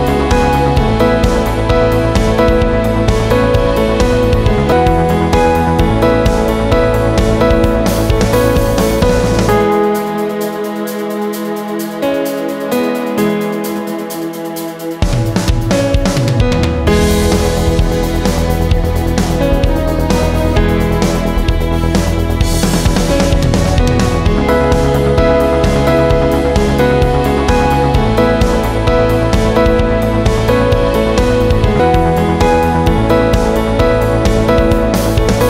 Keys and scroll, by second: 3.9 BackSpace, 5.1 0, 7.7-8.7 typing, 10.4 ctrl+z, 11.4 ], 11.6 ], 11.7 ].